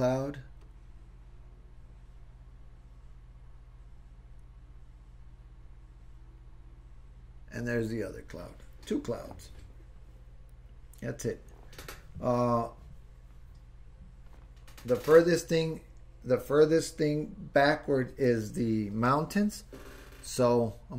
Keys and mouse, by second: 0.6-7.6 drag.